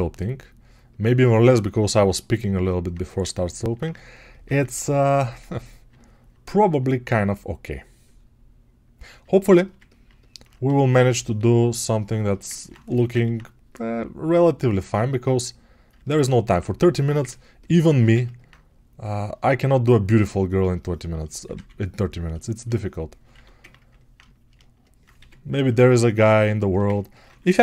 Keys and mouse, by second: 21.1-27.6 right drag, 22.2 shift+2.